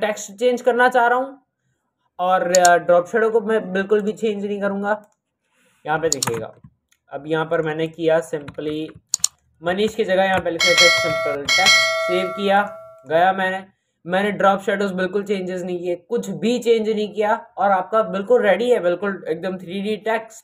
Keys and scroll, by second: 6.1 ctrl+KP_0, 9.6 ctrl+a, 10.5 t, 10.9 e, 11.3 x, 11.4 t.